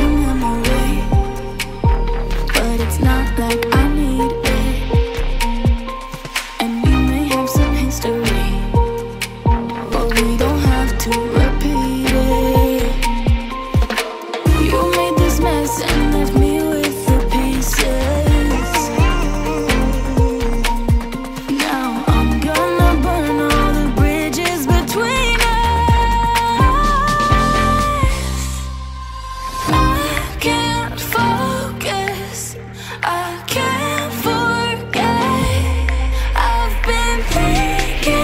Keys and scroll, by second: 3.9 ctrl+alt+shift+e.